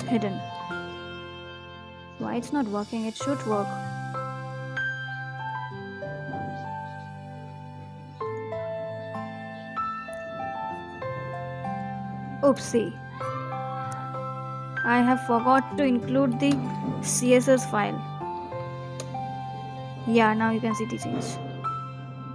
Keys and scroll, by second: 6.1 ctrl+s, 18.9 ctrl+shift+Return, 20.3 Down, 20.5 Down, 20.9 Return, 22.2 Right.